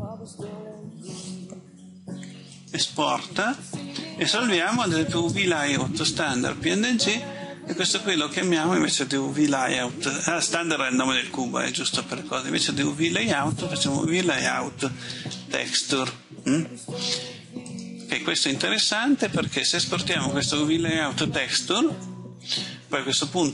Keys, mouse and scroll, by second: 10.9 shift+Left, 11.1 shift+Left, 11.3 shift+Left, 14.6-16.4 typing, 17.5-23.5 drag.